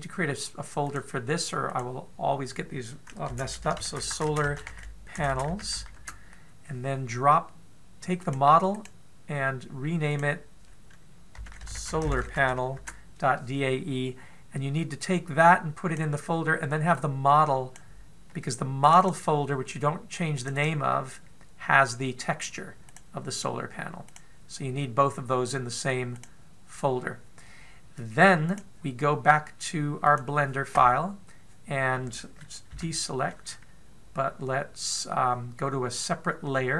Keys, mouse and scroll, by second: 33.3 a.